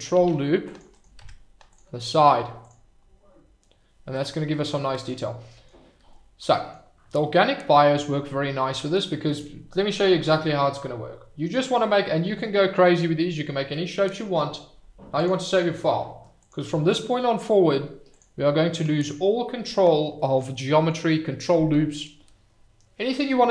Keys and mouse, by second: 0.1 ctrl+r, 0.9 click, 1.2 Tab, 5.1-5.6 middle drag, 6.1-6.7 middle drag, 15.2-16.5 drag.